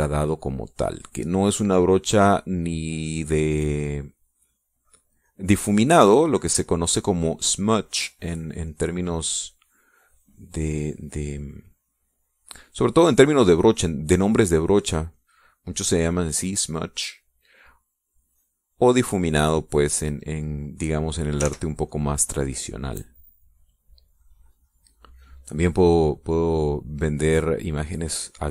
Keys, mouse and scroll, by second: 0.2-4.0 drag, 4.6 click, 7.6-9.3 middle drag, 9.6-12.2 drag, 12.8-15.7 drag, 16.1-18.5 drag, 18.5 middle click, 18.8-22.3 drag, 22.4 ctrl+z, 22.4 ctrl+middle click, 22.8-25.0 ctrl+drag, 25.1-26.3 drag, 26.6-28.5 drag.